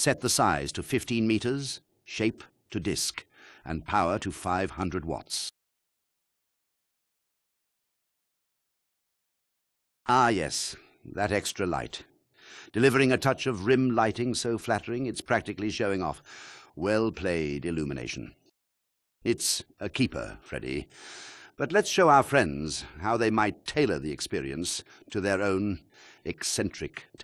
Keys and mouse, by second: 0.9 click, 2.8-3.2 drag, 4.0 click, 4.8 KP_0, 6.1 KP_0, 7.5-7.8 ctrl+drag, 23.7-24.3 drag, 24.3-26.8 middle drag, 24.3 space.